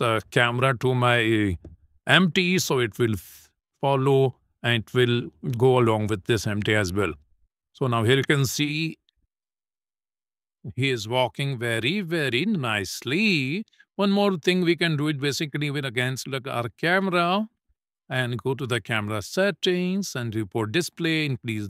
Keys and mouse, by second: 1.3 click, 2.2 shift+click, 3.1 ctrl+p, 6.1 click, 7.2 KP_0, 9.0 click, 9.4 space, 13.0 space, 13.6 click, 16.6 click, 18.1 click, 19.6 click, 21.2 click.